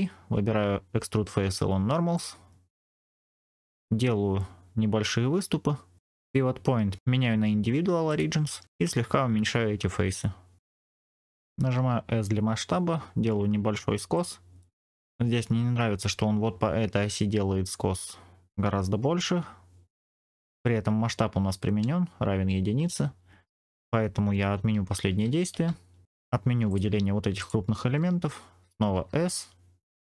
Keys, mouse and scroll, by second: 6.1-8.2 drag, 9.0 s, 10.7 middle click, 11.7 s, 14.0 click, 14.5 middle click, 14.8 scroll down 3, 20.4 Tab, 22.7 Tab, 24.6 ctrl+z, 25.0 ctrl+z, 26.6 shift+click, 27.3 shift+click, 28.8 s.